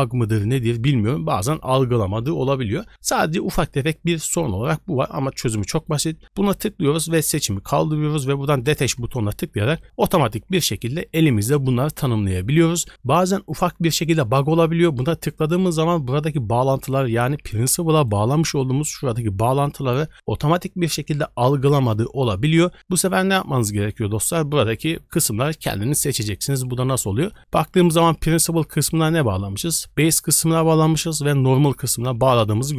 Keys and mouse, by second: 5.7 click, 8.6 click, 17.9 click, 26.5 click, 27.4 click, 30.8 click.